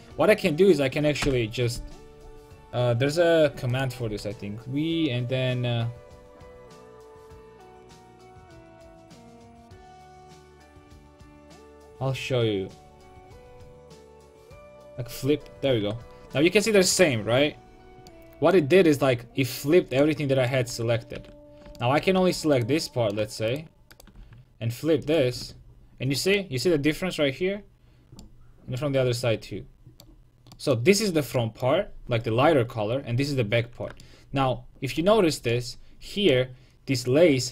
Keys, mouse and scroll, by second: 1.2 space, 4.1 w, 15.8 Tab, 21.2 Tab, 22.2 a, 22.6-26.2 right drag, 24.2 w, 25.4 Tab.